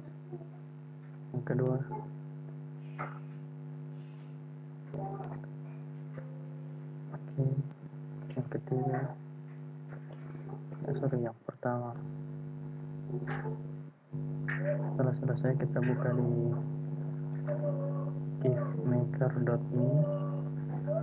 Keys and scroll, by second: 1.9 ctrl+e, 8.9 ctrl+e.